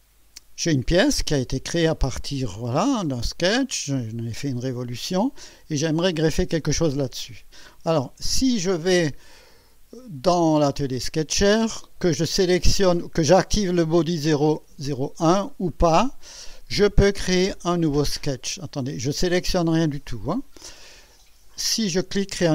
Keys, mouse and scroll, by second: 1.3 click, 2.2 click, 3.7 click, 18.8 click, 21.7 click.